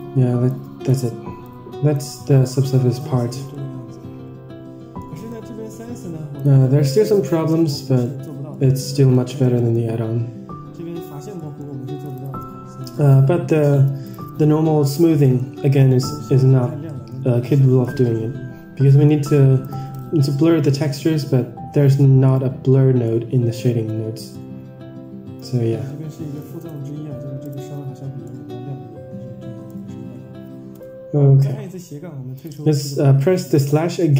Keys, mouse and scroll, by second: 4.9-5.3 middle drag, 5.5 scroll up 2, 6.3 click, 6.3 scroll up 1, 7.9 middle click, 8.4 middle click, 8.8 scroll down 4, 9.0 middle click, 9.5 middle drag, 11.3 middle drag, 12.1 ctrl+shift+drag, 12.7 middle click, 14.0 ctrl+shift+click, 14.8-15.4 middle drag, 15.6 scroll up 3, 15.9 middle click, 16.5 scroll down 3, 17.0 Tab, 17.4 middle drag, 18.1-18.6 scroll up 4, 18.8 middle drag, 19.5 click, 20.4-20.9 middle drag, 21.2 Tab, 22.2-22.9 middle drag, 26.5 ctrl+shift+drag, 28.2-29.7 middle drag, 30.8 /, 32.6 click, 33.8-34.1 scroll down 4.